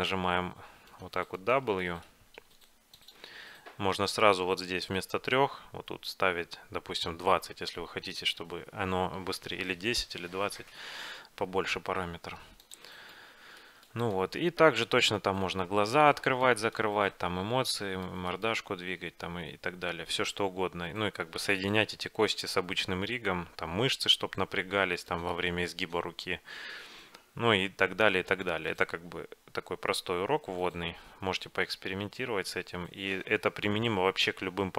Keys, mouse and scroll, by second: 1.0 right click, 1.9-3.6 drag, 1.9-3.3 middle drag, 2.5 w, 3.6-5.2 middle drag, 13.2-23.5 middle drag, 24.8-33.2 middle drag.